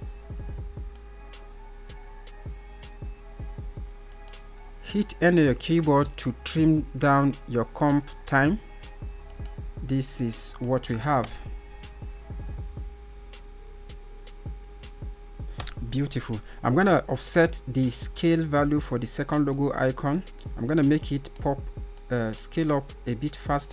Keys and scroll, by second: 4.6 n.